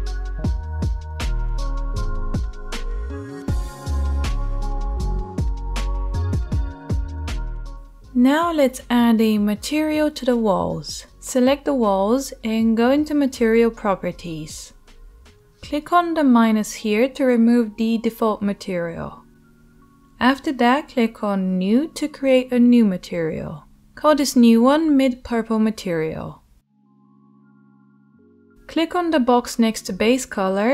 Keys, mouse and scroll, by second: 0.2 middle click, 0.5 click, 1.0 middle click, 1.2 click, 1.9 middle click, 2.2 click, 2.8 middle click, 3.2 click, 3.7 middle click, 4.0-5.0 drag, 5.0-6.1 middle drag, 6.1 click, 6.8 alt+middle click, 7.4-13.7 shift+middle drag, 13.7 click, 13.8-19.0 middle drag, 19.0-23.1 drag, 23.1 middle click, 23.2-30.7 drag.